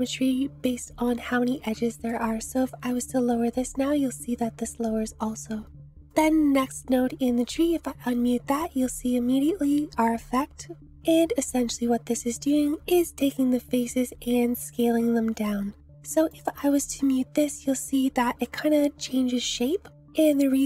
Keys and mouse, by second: 1.7 click, 3.0-6.0 drag, 8.4 m, 9.7 click, 16.1 click, 16.9 m, 18.4-19.1 drag, 20.2 click.